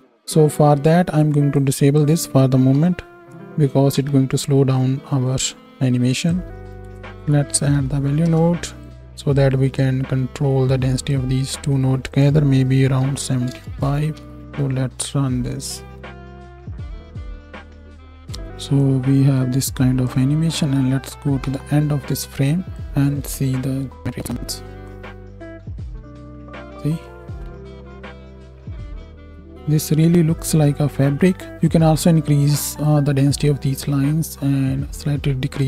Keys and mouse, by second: 2.8 m, 4.0 shift+Left, 14.1 shift+Right, 14.3 shift+Left, 14.4 space, 18.1 space, 21.5 shift+Right, 22.7-24.3 drag, 24.3 m, 28.4 z.